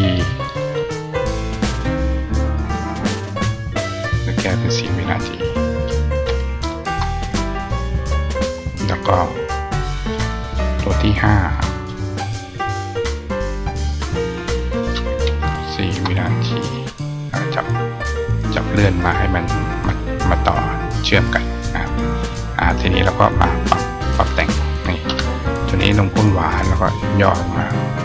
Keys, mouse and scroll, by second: 0.1 click, 0.3 click, 1.7 click, 3.6 click, 4.7 click, 5.3 click, 9.9 click, 11.4 click, 11.6 click, 14.5 click, 17.5 click, 18.9 click, 21.0 click, 23.3 click, 24.1 click, 25.6 click, 27.3-28.0 drag.